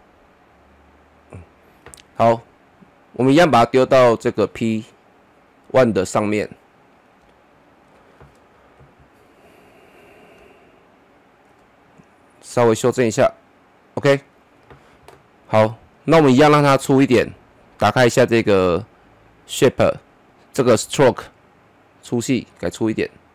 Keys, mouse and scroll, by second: 6.5-11.8 drag, 11.8-23.3 drag.